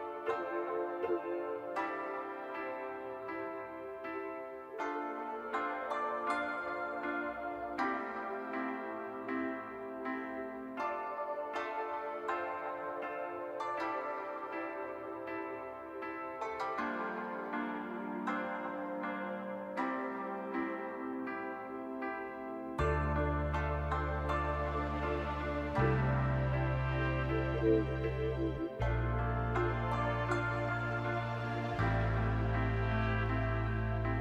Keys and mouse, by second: 0.5 click, 1.7 shift+click, 2.1 shift+click, 2.7 click, 4.7 shift+click, 6.4 shift+click, 7.7 shift+click, 8.9 click, 10.5 shift+click, 11.0 click, 12.2 shift+click, 12.5 click, 13.5 click, 15.3 click, 16.9 click, 18.7 click, 19.4 click, 19.8 click, 20.0 click, 21.6 click, 22.5 shift+click, 22.7 click, 23.4 shift+click, 24.0 click, 25.4 click, 26.7 middle click, 27.3 shift+middle click, 27.9 click, 29.2 click, 29.8 shift+click, 30.7 shift+click, 31.2 click, 32.0 click, 32.3 middle click, 33.0 middle click, 34.0 shift+click.